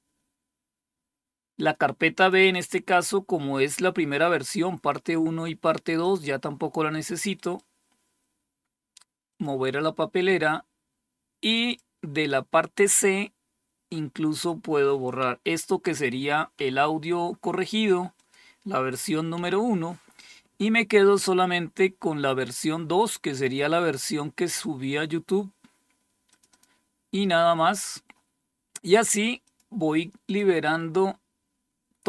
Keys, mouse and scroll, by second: 1.6 click, 1.9 click, 5.4 click, 6.8 right click, 7.3 right click, 8.7 click, 10.9 click, 11.1 click, 13.8 click, 14.3 click, 16.0 Delete, 17.6 click, 18.8 Delete, 23.9 click, 25.7 click, 26.0 click, 28.9 click, 29.7 click.